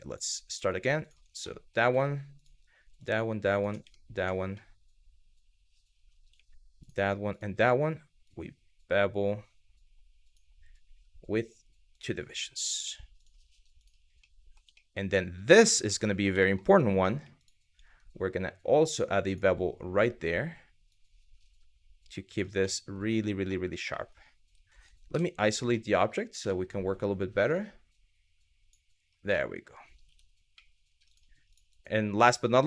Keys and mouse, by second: 0.6 alt+click, 1.0 middle click, 2.0 alt+click, 4.2-5.4 middle drag, 6.9 alt+click, 7.9 click, 11.6 click, 12.8 click, 14.0 middle click, 14.4 shift+middle click, 15.5 shift+middle click, 16.1 shift+middle click, 17.0 alt+click, 18.9 click, 20.6 click, 22.3 middle click, 23.2 middle click, 23.6 shift+middle click, 24.7 KP_Divide, 25.3 middle click, 26.2 shift+middle click, 27.2 click, 29.1 middle click, 29.8 Tab, 30.2-30.5 middle drag.